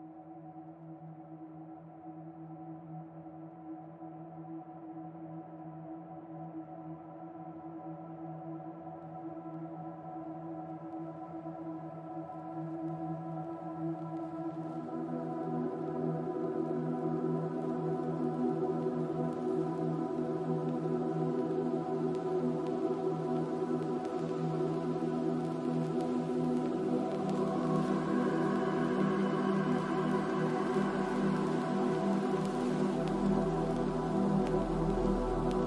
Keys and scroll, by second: 4.0 3, 5.0 ,, 5.2 3, 7.6 6, 8.3 Return, 11.8 ctrl+c, 14.2 ctrl+v, 14.4 Return, 17.1 ctrl+v, 17.4 Return.